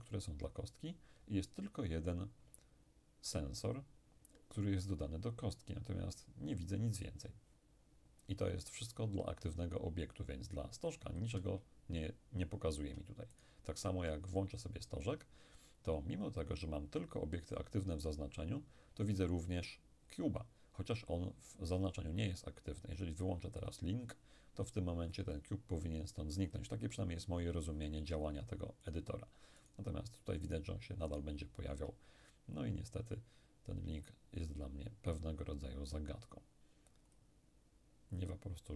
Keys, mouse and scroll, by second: 13.4 shift+right click, 23.7 click, 28.9-32.2 shift+right drag, 37.2-38.7 drag.